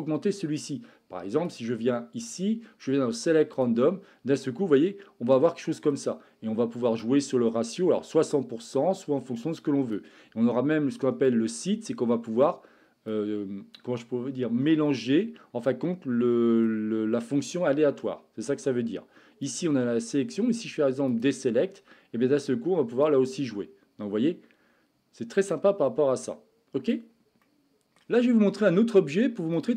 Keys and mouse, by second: 1.5-3.7 drag, 4.3-6.0 middle drag, 7.1-10.0 drag, 11.3-13.1 drag, 14.9-16.7 middle drag, 19.5-21.3 drag, 23.1-27.0 drag, 27.4 middle click, 29.6 click.